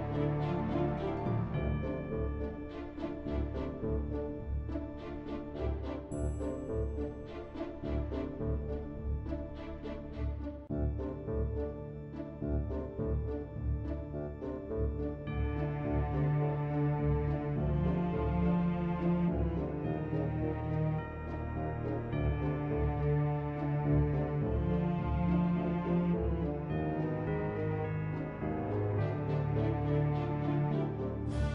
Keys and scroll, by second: 2.5 ctrl+w, 7.6 ctrl+w, 10.9 Delete, 13.5-14.7 typing.